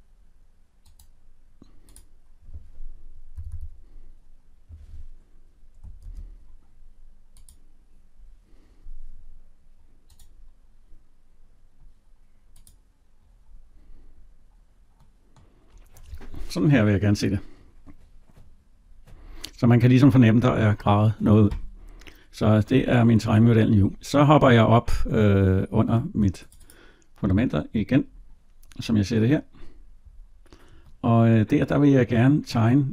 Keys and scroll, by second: 5.8 ctrl+z.